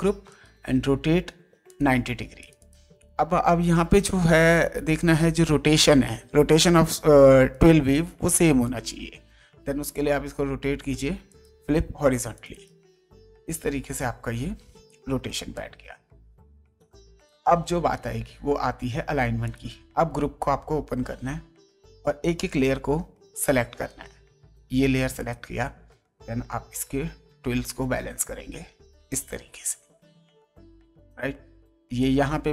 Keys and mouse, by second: 0.3 right click, 1.7 click, 7.5 right click, 8.6 click, 9.8 right click, 11.3 click, 12.3 click, 15.1 space, 15.5 ctrl+click, 17.2 ctrl+space, 19.4 click, 23.9 ctrl+right click, 25.2 ctrl+click, 27.3 ctrl+Down, 31.8 space, 32.0 click.